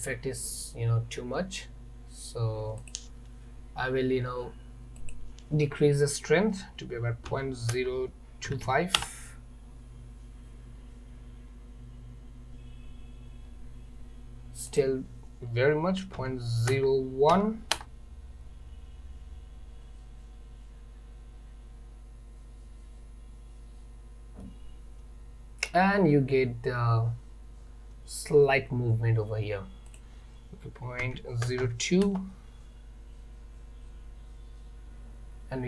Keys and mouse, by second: 2.9 click, 5.0-9.7 drag, 14.8-18.8 drag, 24.5-25.8 middle drag, 30.0-32.7 drag.